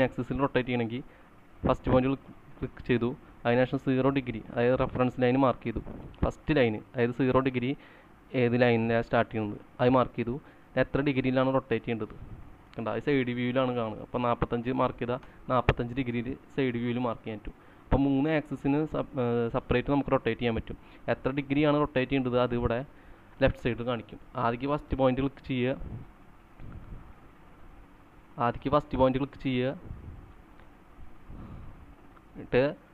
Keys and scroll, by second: 12.8-15.3 typing, 16.7 typing, 17.9-19.6 typing, 24.9 space.